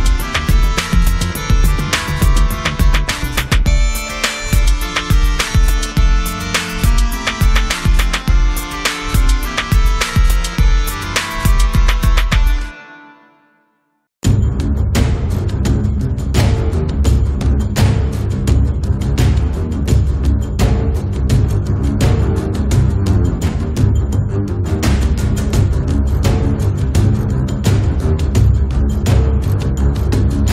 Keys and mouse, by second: 0.1 middle click, 0.4 click, 1.1 middle click, 1.4-2.4 drag, 2.4 middle click, 2.8 click, 3.5 middle click, 3.6-6.4 drag, 6.4 right click, 6.5 g, 6.6 f, 6.7 click, 7.4 middle click, 7.6 click, 8.0 ctrl+z, 8.4 middle click, 9.3 click, 10.0 f, 10.3-11.8 drag, 11.8 middle click, 12.0-13.1 drag, 13.1 right click, 13.3 middle click, 13.5 f, 13.6-15.0 drag, 15.2-16.3 drag, 17.1 click, 18.6 click, 19.2 ctrl+z, 19.6 click, 20.7 f, 21.5-22.7 drag, 22.3-23.5 middle drag, 22.9-24.4 drag, 22.9 right click, 24.0 middle click, 24.0 right click, 24.4 KP_3, 24.5 middle click, 25.4-26.4 drag, 27.0 click, 27.8 middle click, 28.0-29.2 middle drag, 29.2 click, 29.5 middle click, 30.0 click.